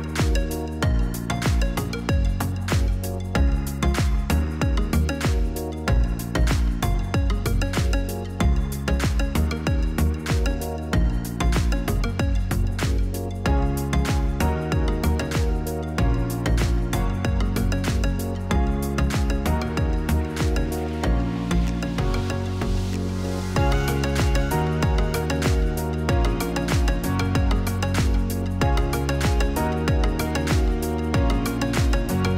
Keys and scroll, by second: 22.3 Return, 25.7-27.2 typing, 27.6 Return, 31.0 ctrl+z.